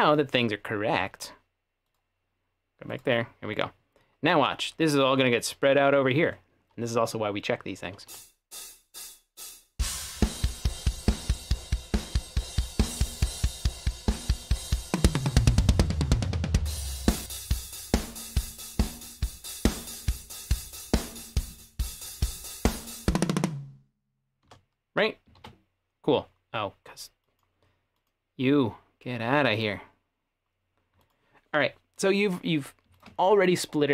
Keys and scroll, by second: 8.1 space, 23.2 t, 24.5 space, 25.4 t.